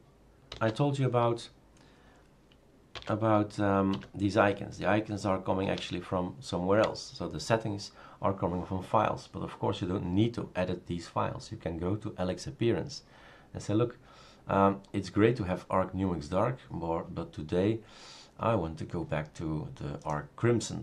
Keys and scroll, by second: 0.7 shift+super+d, 3.0-3.9 typing, 5.7 Return.